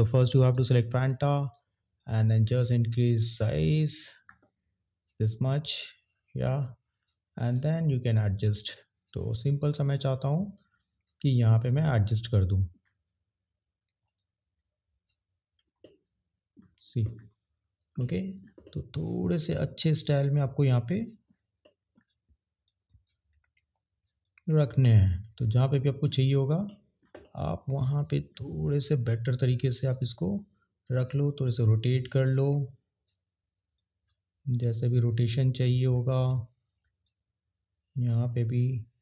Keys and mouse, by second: 0.4 click, 1.5 click, 5.2 click, 7.5 click, 10.5 click, 14.1 click, 22.6 click, 24.2 click, 29.9 click, 32.2 click, 33.7 click, 34.3 click, 37.0 click, 37.6 click.